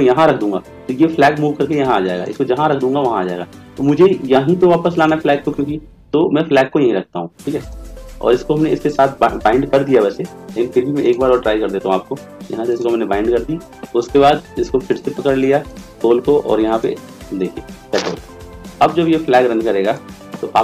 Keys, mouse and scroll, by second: 14.9-16.8 right drag.